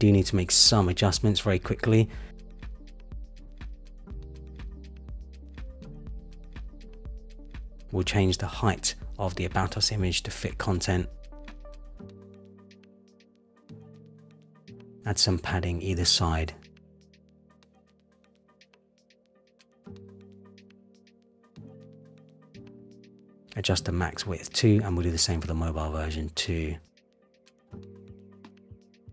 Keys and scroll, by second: 3.2 super+=, 8.5 super+-, 19.7 Return, 22.3 Return, 25.4 Return.